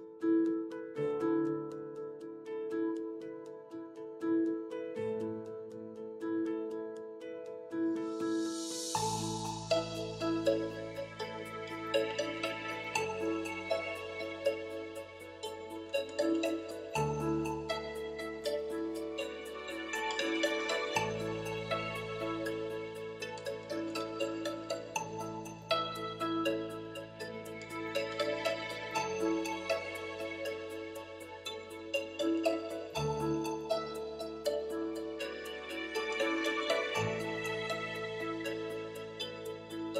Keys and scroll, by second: 37.3 3.